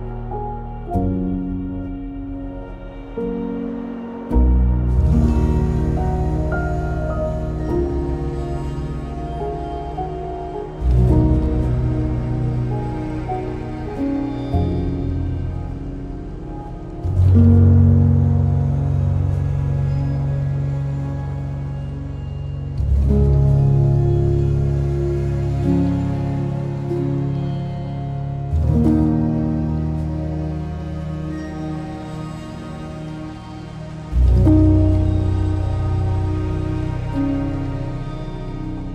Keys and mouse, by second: 3.2 click, 3.5 shift+click, 4.3 g, 8.1 click, 10.2 ctrl+r, 10.5 click, 11.4 2, 12.8 e, 13.6 click, 14.4 s, 15.1 Escape, 15.8 o, 16.6 s, 17.4 click, 18.0 e, 18.6 click, 19.1 r, 20.3 s, 21.2 click, 21.9 e, 23.0 click, 24.2 r, 25.0 click, 25.4 g, 26.5 click, 27.3 e, 28.9 r, 30.0 click, 31.6 s, 32.2 click, 32.9 e, 34.3 click, 34.7 r, 35.7 click, 36.1 g, 37.0 click.